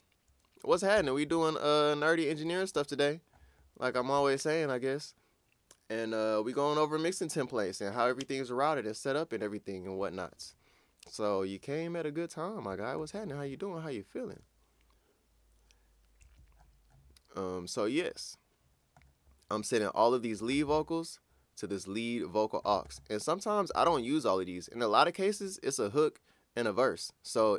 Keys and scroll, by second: 0.9 super+Tab.